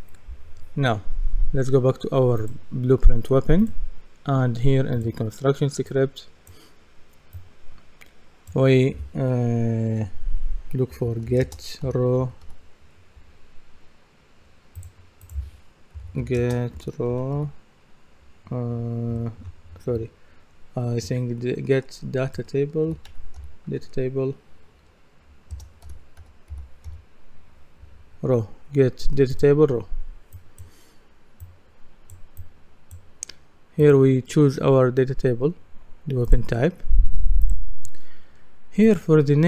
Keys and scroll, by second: 10.7-12.9 typing, 16.0-17.8 typing, 22.6-24.2 typing, 25.5-27.0 typing.